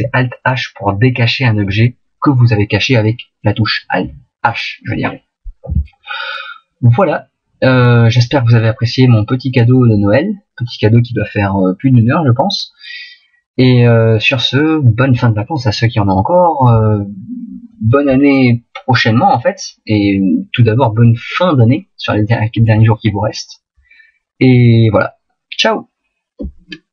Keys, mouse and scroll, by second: 7.1 middle click, 13.8 middle click.